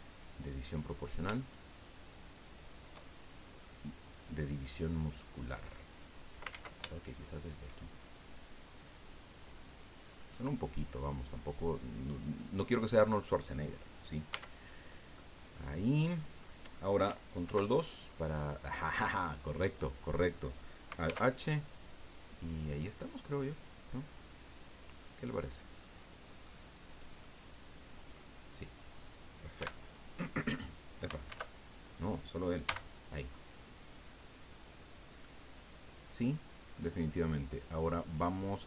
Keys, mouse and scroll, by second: 0.9 right click, 1.7 shift+right click, 3.0 shift+middle click, 4.6-6.5 drag, 6.5 ctrl+z, 7.3 shift+right click, 8.3-10.1 drag, 10.2-12.8 middle drag, 14.3 Tab, 14.8 scroll down 2, 15.1-16.3 drag, 17.4 ctrl+2, 21.0 alt+h, 22.7 scroll down 2, 23.2-25.2 drag, 25.3 scroll up 2, 25.8 click, 26.7 scroll down 1, 27.2-28.2 drag, 29.6 h, 31.2 alt+h, 31.8 right click, 32.6 h, 33.3-36.9 middle drag.